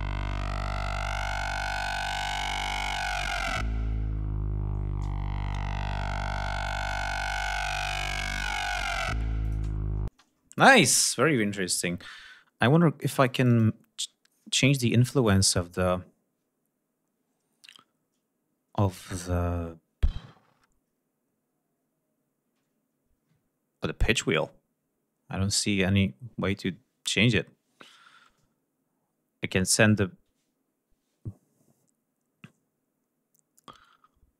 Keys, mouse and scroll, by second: 4.8 ctrl+scroll up 2, 6.6-7.0 drag, 9.4 click, 10.2 space, 10.7 click, 13.2 click, 29.8-34.3 drag.